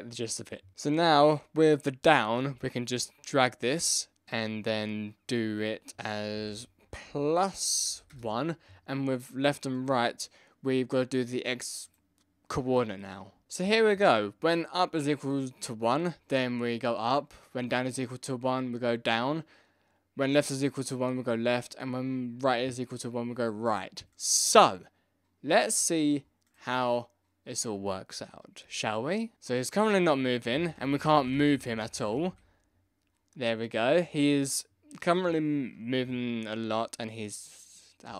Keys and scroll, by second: 6.3 Left, 6.4 Left, 8.1 Return, 30.4 Left, 30.5 Down, 30.5 Right, 30.7 Down, 30.7 Right, 31.0 Up, 31.1 Down, 31.1 Right, 31.2 Left, 31.3 Down, 31.5 Right, 31.5 Left, 31.6 Down, 31.6 Right, 31.7 Left, 31.8 Down, 31.9 Left, 31.9 Right, 32.1 Down.